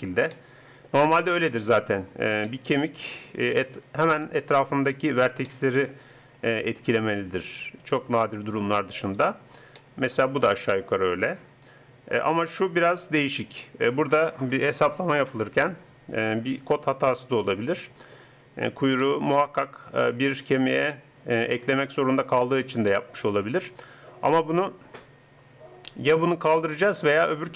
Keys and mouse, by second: 15.2-18.2 middle drag, 20.7 middle click, 21.7 middle click, 22.9-27.5 middle drag.